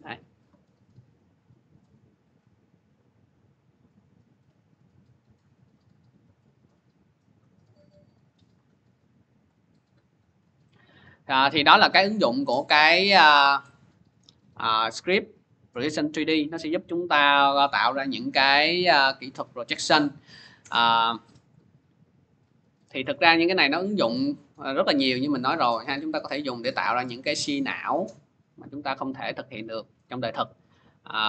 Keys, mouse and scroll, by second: 1.0 click, 1.6 click, 5.9 scroll, 7.6-9.2 scroll, 9.2 click, 13.9 click, 14.7 click, 16.9 click, 20.7 scroll, 22.9 alt+Tab, 24.3 alt+Tab, 24.8 middle click, 26.6 click, 26.7 scroll, 27.3 click, 28.1 click, 29.0 click, 29.9-31.2 drag.